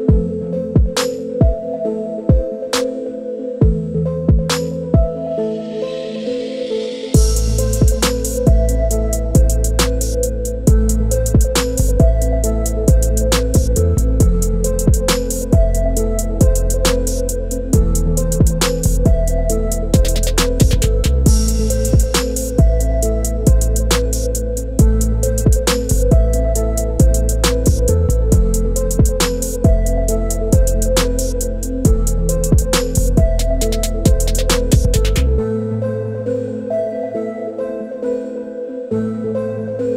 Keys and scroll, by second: 3.2 6, 3.5 Return, 28.1 e.